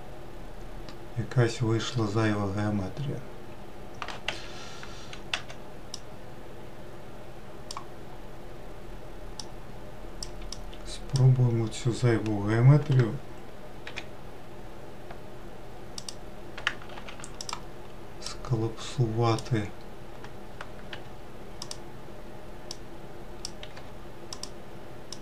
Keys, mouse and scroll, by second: 5.1 1, 5.8 click, 9.3 click, 10.4 click, 13.7 m, 17.3 click, 18.1 click, 20.8 m, 22.6 click, 23.6 m, 25.0 click.